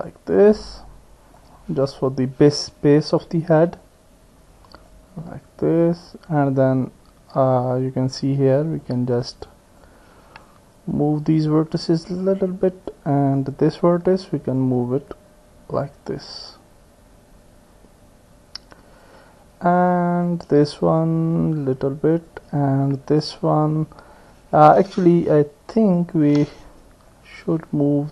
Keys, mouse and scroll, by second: 3.3 click, 4.9-8.2 drag, 8.9 click, 9.8 click, 11.4-12.4 drag, 12.9 click, 14.7-19.1 drag, 19.8 click, 21.0-22.3 drag, 22.9-24.6 drag, 27.1-28.1 drag.